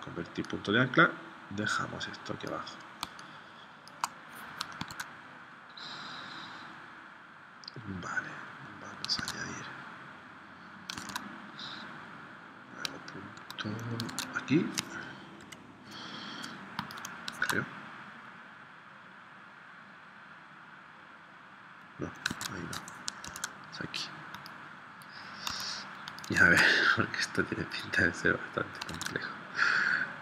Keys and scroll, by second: 3.0 space, 4.8 super+Tab, 9.2 super+Tab, 11.0 super+Tab, 14.2 super+Tab, 15.4 p, 17.4 super+Tab, 22.4 super+Tab, 23.2 super+z, 25.6 a, 26.5 super+Tab, 29.0 super+Tab.